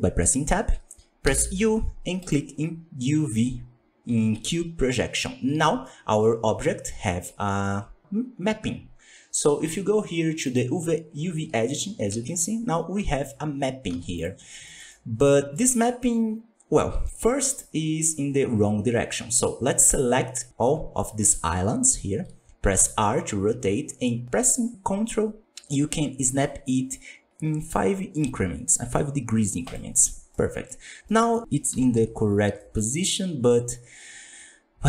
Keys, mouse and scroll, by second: 2.3 u, 5.1 scroll down 2, 5.5 Tab, 5.8-7.3 middle drag, 7.3-7.9 scroll up 8, 10.4 click, 12.0 a, 13.2-13.5 scroll up 14, 13.7 scroll down 2, 13.9 z, 14.4 scroll down 1, 14.6-21.2 shift+middle drag, 21.2 a, 22.8 r, 30.3 middle click, 30.9 scroll up 1, 31.0 middle click, 31.6 KP_1, 32.0 Tab, 32.5 shift+middle drag, 32.7-34.8 scroll up 20.